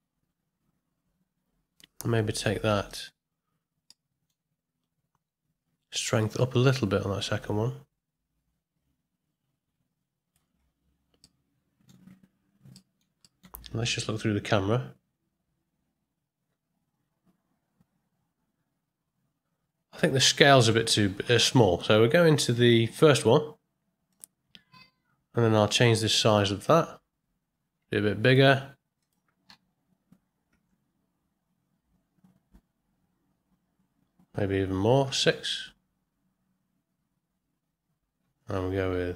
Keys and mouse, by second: 2.9 click, 4.0 middle click, 6.3-10.4 shift+drag, 11.2-11.9 middle drag, 12.8 middle click, 13.2 ctrl+middle click, 14.1 KP_0, 26.2-28.3 drag, 29.0-39.1 drag, 34.3 KP_Enter, 38.2 KP_Enter.